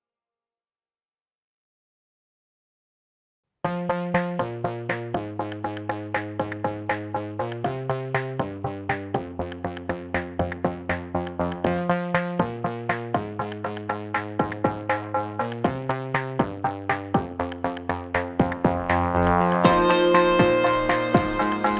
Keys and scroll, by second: 1.8 q, 2.9 ctrl+shift+d, 2.9 ctrl+shift+z, 6.2 m, 8.6 Escape, 10.2 space, 11.1 space, 13.4 z, 17.0 Delete, 18.1 q, 18.8 n, 20.0 space, 21.1 q.